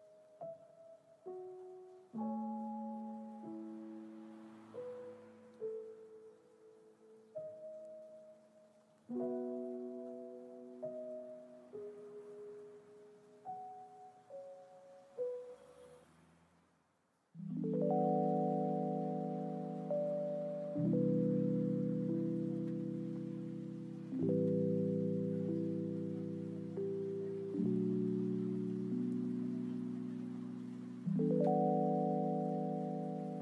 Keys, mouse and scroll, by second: 1.2 click, 5.4 click, 6.2 g, 16.9 click, 19.8-20.7 drag, 21.6-29.3 drag, 29.7 click.